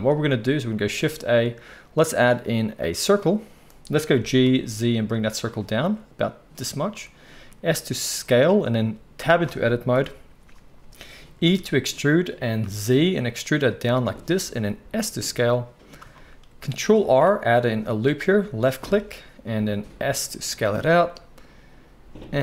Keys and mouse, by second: 0.8-16.2 shift+right drag, 0.9 shift+a, 4.1 g, 7.3 s, 9.2 Tab, 9.9 KP_1, 11.4 e, 16.0 shift+s, 16.2-22.4 drag, 17.0 ctrl+r, 19.7 s.